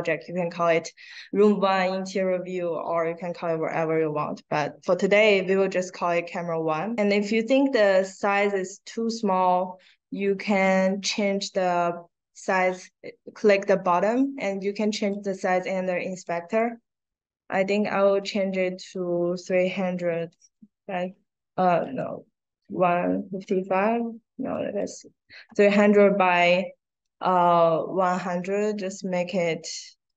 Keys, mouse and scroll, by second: 4.2 middle click, 5.1 middle click, 5.5 middle click, 6.6-7.7 drag, 8.2 click, 10.6 click, 14.6 click, 16.2 click, 18.7 click, 21.8 click, 24.5 click, 26.4 middle click, 27.0 click, 28.0 click, 30.0 click.